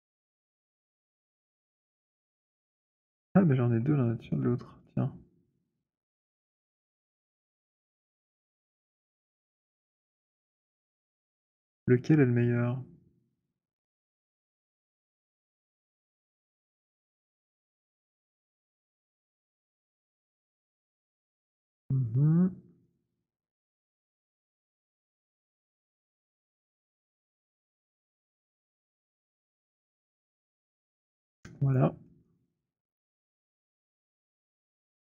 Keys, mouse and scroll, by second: 0.2 click, 0.9 alt+right click, 2.7 alt+right click, 2.9 click, 4.4 alt+middle click, 4.8 alt+click, 6.7 click, 9.1 alt+click, 10.0 alt+middle click, 11.5 alt+click, 13.7 click, 17.1 click, 19.6 click, 21.0 click, 22.9 click, 25.1 click, 26.1 click, 28.3 click, 28.7 alt+click, 29.3 Delete, 32.2 alt+click, 32.2 alt+middle click, 32.8 alt+right click, 33.0 alt+click, 34.3 click.